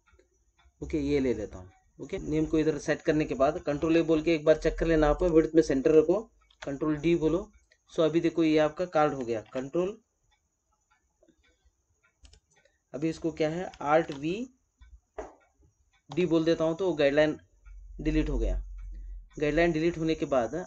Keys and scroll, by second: 3.7 ctrl+a, 6.4 ctrl+d, 9.3 alt+v, 13.9 alt+v.